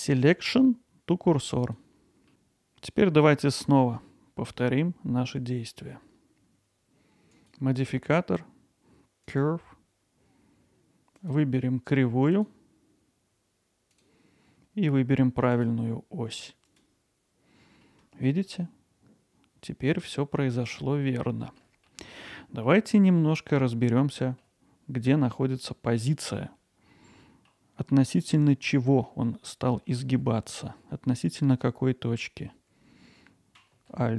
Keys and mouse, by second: 7.3-9.4 drag, 11.3-14.0 drag, 15.5-16.8 drag, 17.8-18.3 middle drag, 18.6-21.6 alt+middle drag, 21.9 middle drag, 22.4 middle drag, 23.2 middle click, 23.9-24.4 alt+middle drag, 25.9-26.3 middle drag, 27.2 middle drag, 27.9 middle click, 29.0 middle drag, 29.9 alt+middle click, 31.1 alt+middle click.